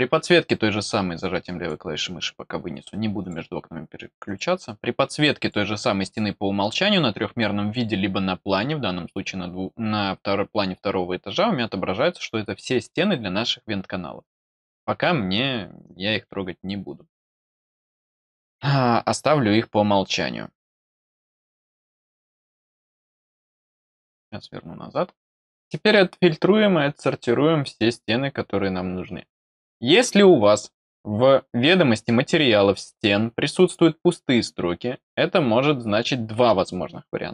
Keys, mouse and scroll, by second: 3.2 click, 4.2 click, 5.4 click, 6.0 click, 15.8-17.4 drag, 20.0 click, 22.6-23.9 drag, 25.1-28.6 scroll down 1, 29.3-29.9 scroll up 2.